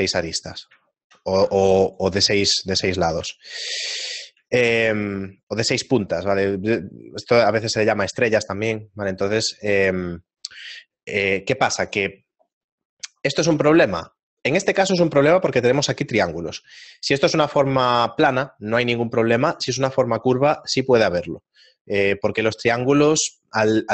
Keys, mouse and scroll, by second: 1.0 shift+middle click, 1.0 right click, 3.9 ctrl+Tab, 3.9 right click, 3.9 shift+middle click, 4.6 shift+middle click, 7.3 right click, 9.1 right click.